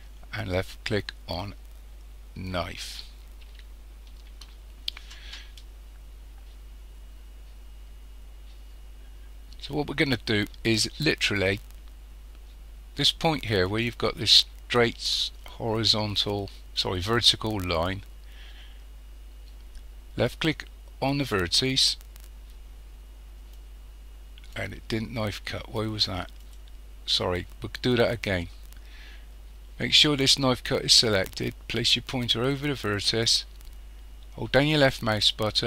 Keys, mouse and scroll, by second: 23.6 click, 26.4 click, 30.0 click, 32.6-35.6 drag.